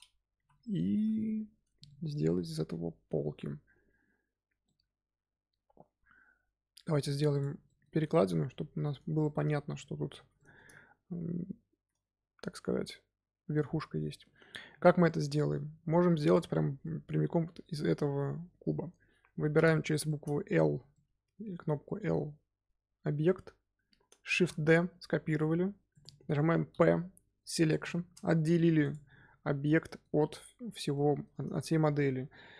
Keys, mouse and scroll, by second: 0.3 z, 0.7 scroll down 2, 0.9 z, 1.8-7.2 shift+middle drag, 7.2 click, 7.6-8.5 shift+middle drag, 8.5-8.8 scroll up 1, 9.1-10.7 shift+middle drag, 10.7 scroll up 2, 13.7-15.8 middle drag, 15.8 Tab, 16.2 click, 16.4-19.5 middle drag, 19.5 l, 20.0 middle click, 20.7 scroll down 2, 20.9-22.0 middle drag, 22.0 scroll up 2, 24.3 shift+d, 26.6 p, 28.4 Tab, 28.7 click, 29.3 scroll down 2, 29.8-31.4 middle drag, 31.4 scroll up 2.